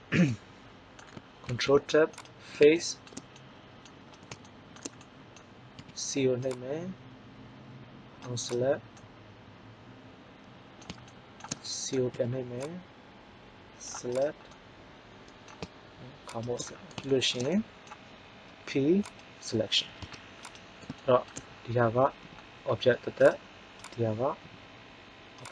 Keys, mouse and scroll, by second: 1.5 ctrl+Tab, 5.7 c, 9.9 middle click, 11.2 middle click, 12.2 c, 14.5 click, 16.4-17.6 middle drag, 18.4 p, 19.8 Tab, 20.3-20.8 right drag, 21.0 middle click, 22.1 g, 24.3 g.